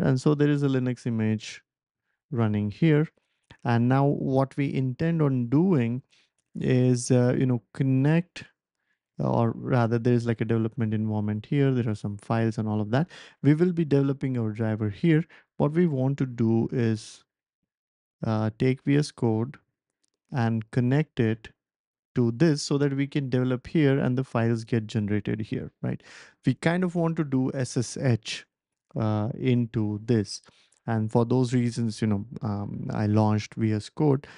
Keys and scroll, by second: 33.2 BackSpace.